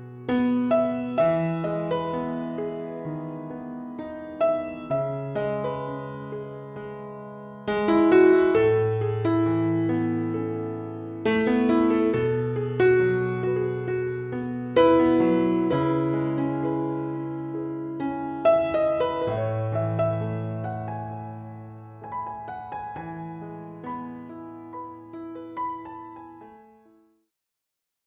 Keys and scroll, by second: 6.6 ctrl+z, 6.7 ctrl+z.